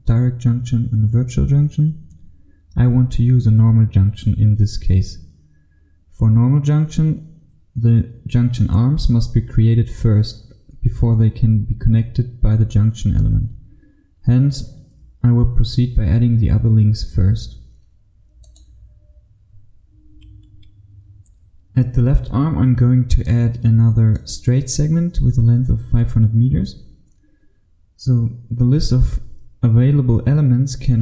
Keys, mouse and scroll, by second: 20.5 Escape, 23.4 click.